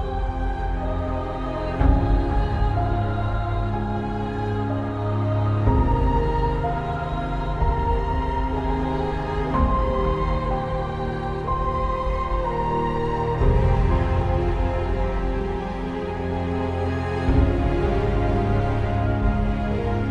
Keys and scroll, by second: 0.2 space, 17.6 alt+space.